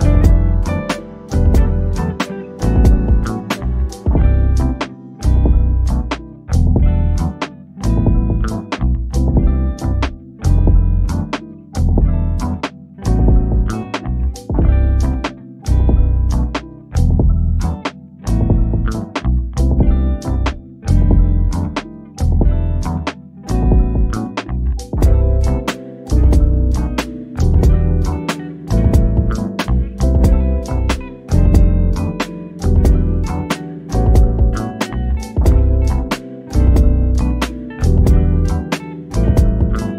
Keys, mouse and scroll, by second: 2.7-3.1 scroll down 1, 3.1 middle click, 3.4 scroll up 1, 4.5 click, 6.1 scroll down 1, 7.0 click, 8.9 click, 11.3 click, 12.1 1, 14.6-15.3 typing, 15.9 click, 18.3 click, 21.9 Escape, 22.9 o, 23.1 click, 23.7 scroll up 1, 24.2 click, 25.3 Escape, 26.4 shift+click, 28.9 Return, 30.1 click, 31.2 o, 31.6 click, 32.7-34.2 drag, 34.2-34.6 scroll down 1, 34.6-36.0 drag, 36.0 scroll down 1, 36.2-38.1 drag, 39.5 scroll down 1.